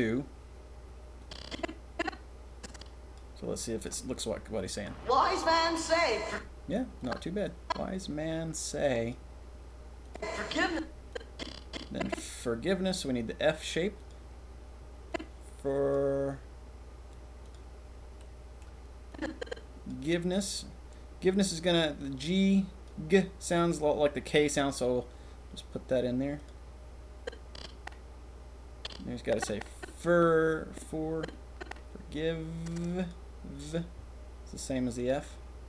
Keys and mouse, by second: 3.3-4.8 middle drag, 6.2 click, 7.0-7.6 drag, 9.1-10.1 drag, 10.3 click, 10.7-11.1 drag, 12.4-15.9 drag, 17.4 click, 18.2 click, 19.1 click, 22.0 click.